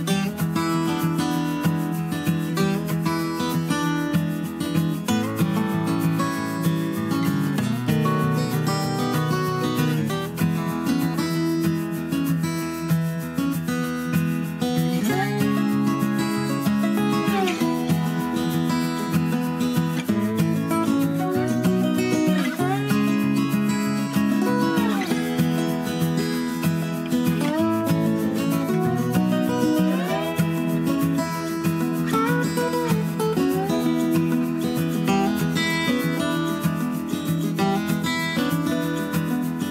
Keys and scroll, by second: 1.8 Page_Down, 1.9 Page_Down, 7.4 Left, 7.5 Left, 7.7 Up, 8.3 Down, 15.5 super+d.